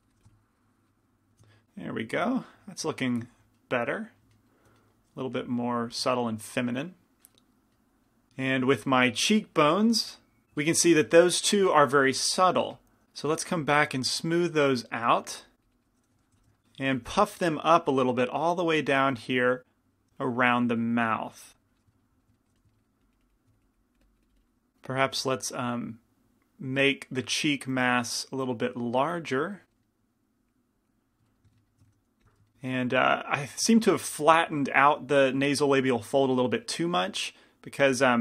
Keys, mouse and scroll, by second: 0.3 f, 1.5 middle click, 1.7 middle click, 5.0-8.0 middle drag, 5.6-8.0 drag, 12.8 f, 13.0 f, 13.7-16.5 drag, 16.4 i, 16.4 f, 17.1 f, 17.8-22.5 drag, 22.6 f, 23.1-24.7 drag, 24.7 g, 24.7 f, 25.0-26.7 middle drag, 25.3 f, 26.7-30.1 drag, 30.1 middle click, 31.3-33.9 middle drag, 31.9 shift+f.